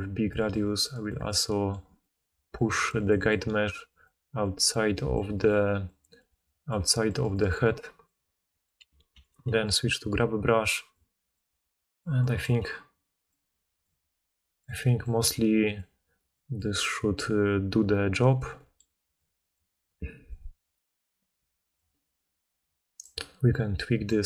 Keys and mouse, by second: 4.9-8.6 right drag, 8.6-24.2 drag, 9.1 g.